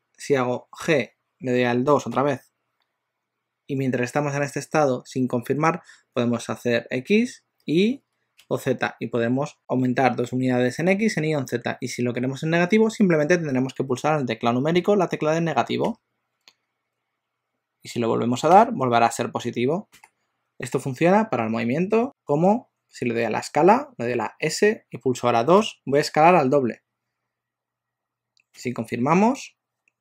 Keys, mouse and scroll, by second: 0.9 g, 22.0 alt+g, 24.5 s.